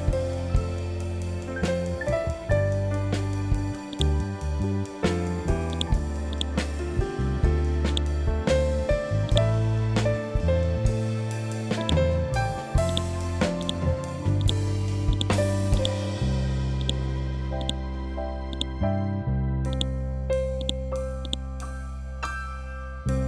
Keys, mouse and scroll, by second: 11.2-18.0 drag, 18.4 scroll up 1, 19.2-20.7 drag.